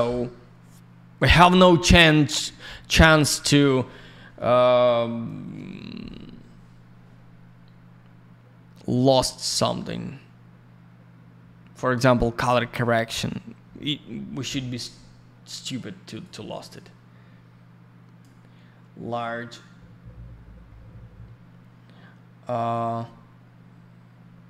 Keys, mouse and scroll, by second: 16.1 right click, 16.7 click.